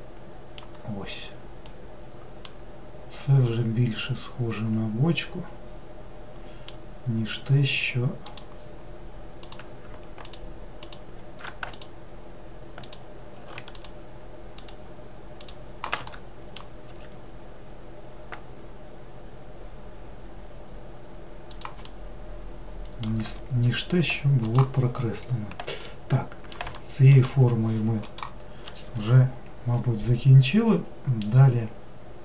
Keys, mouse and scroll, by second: 0.8-1.7 scroll down 1, 1.7-3.0 middle drag, 3.0-3.5 scroll down 1, 3.5-6.7 middle drag, 8.3-9.6 drag, 10.3 ctrl+click, 10.8 ctrl+click, 11.8 alt+click, 12.9 alt+click, 13.8 alt+shift+click, 14.6 alt+shift+click, 15.4 alt+shift+click, 16.1 middle click, 16.9 s, 21.9-24.5 middle drag, 24.5 click, 24.9-25.9 scroll down 1, 25.9-27.3 middle drag, 27.3 scroll down 1.